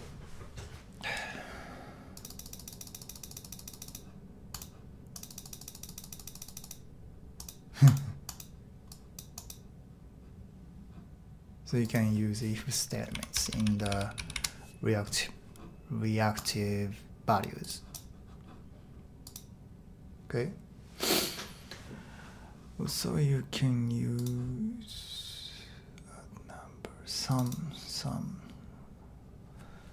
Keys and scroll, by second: 2.3 typing, 12.9-14.8 typing.